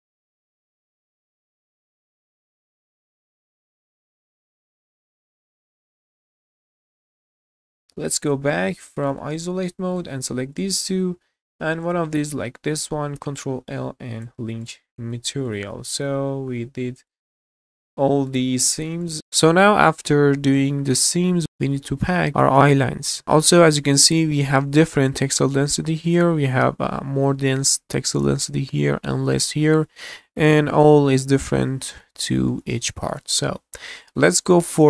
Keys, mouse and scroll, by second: 0.0 alt+click, 0.2 q, 0.5-1.0 scroll up 4, 0.6 shift+middle click, 1.0 middle click, 1.5 scroll up 2, 1.7 shift+middle click, 2.7 click, 2.9 scroll down 2, 3.1 middle click, 3.7 ctrl+click, 4.0 q, 4.5 click, 4.8 KP_Decimal, 5.0 scroll down 2, 5.2 middle click, 5.4 click, 5.6 middle click, 6.0 ctrl+click, 6.1 q, 6.4 scroll down 7, 6.7 shift+middle click, 6.8 a, 6.9 middle click, 7.1 u, 7.9 /, 8.8 middle click, 9.1 Tab, 9.9 click, 10.5 shift+click, 12.1 shift+click, 13.2 ctrl+l, 14.6 click, 14.9 scroll up 2, 15.3 shift+middle drag, 15.7-17.1 middle drag, 17.4 scroll down 2, 17.6 shift+middle click, 18.0-18.3 middle drag, 18.5 scroll down 1, 18.8 shift+middle click, 19.1 middle click, 20.5 middle click, 23.2 shift+middle drag, 23.2 scroll down 1, 23.6-24.0 scroll up 3, 24.1-24.5 shift+middle drag, 26.1 click, 28.8-29.1 shift+middle drag, 29.3 click, 29.6 scroll down 2, 29.9 shift+middle drag, 30.4 middle drag, 31.5 scroll down 1, 31.8 shift+middle drag, 32.3 middle click, 32.8-33.1 shift+middle drag.